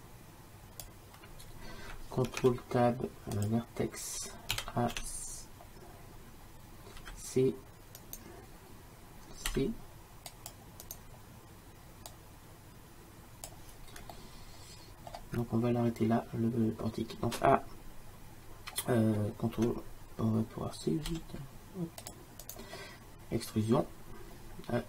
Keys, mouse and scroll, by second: 2.3 ctrl+Tab, 4.6 a, 5.0 v, 7.1 c, 9.6 c, 11.0-14.2 drag, 14.2-17.4 middle drag, 21.2 c.